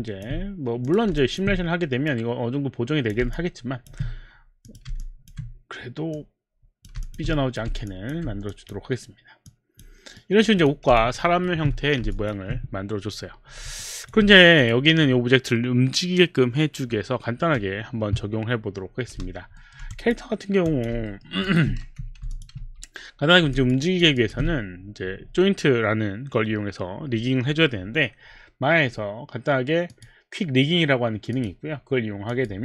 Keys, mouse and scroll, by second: 0.8 click, 1.2 alt+click, 1.4 alt+click, 2.1 click, 3.3 alt+click, 4.6 click, 5.0 alt+click, 6.2 click, 6.6 click, 7.3 alt+click, 7.4 right click, 7.9 alt+click, 8.5 click, 9.5 click, 10.2 right click, 10.5 click, 11.1 alt+click, 11.1 right click, 11.3 alt+right click, 12.1 alt+click, 13.8 alt+click, 19.6 alt+middle click, 19.9 click, 20.7 click, 21.0 alt+middle click, 21.5 alt+click, 21.8-23.1 typing, 22.4 alt+click, 22.6 alt+click, 23.6 alt+click, 23.8 alt+right click, 24.2 alt+click, 29.9 click, 31.3 click, 32.3 click.